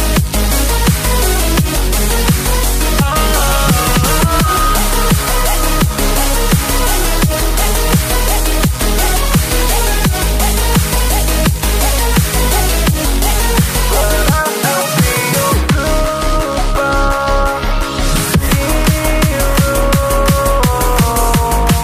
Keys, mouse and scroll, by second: 4.5 click, 5.5 scroll up 1, 7.7 click, 14.2 s, 15.5 click, 19.2 click.